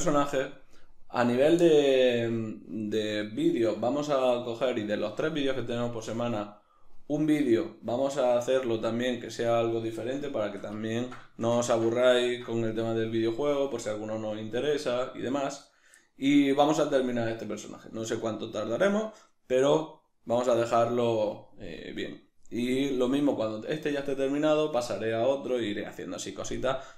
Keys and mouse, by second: 9.4-22.4 middle drag, 22.4-26.6 right drag, 26.6-26.9 middle drag.